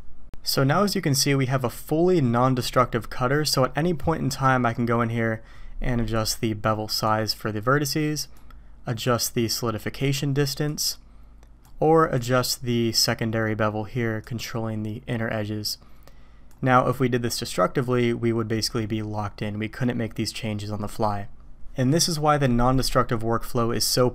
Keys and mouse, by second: 6.1 click, 7.0-8.4 drag, 9.0 drag, 10.6-11.6 drag, 13.0 drag, 14.2-16.5 drag.